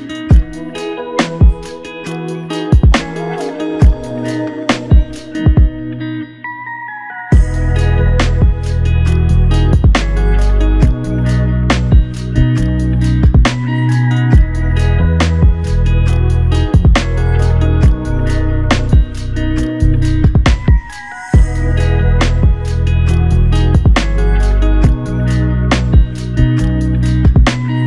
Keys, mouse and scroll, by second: 8.2 double click, 13.0 double click, 18.5 f, 19.3 double click, 22.5 shift+click, 23.4 shift+click, 25.2 double click, 26.0 alt+click.